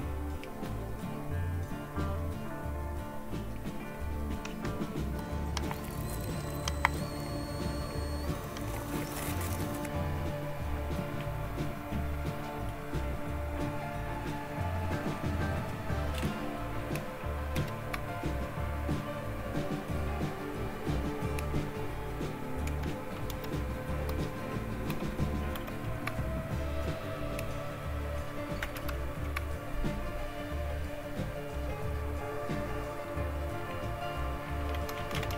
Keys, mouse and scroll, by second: 4.3 End, 4.5 Down, 5.1 Return, 17.4 super+2, 22.5 super+3, 23.2 super+4, 24.0 super+5, 24.8 super+6, 25.4 super+7, 28.6 super+Return, 34.5-35.3 typing.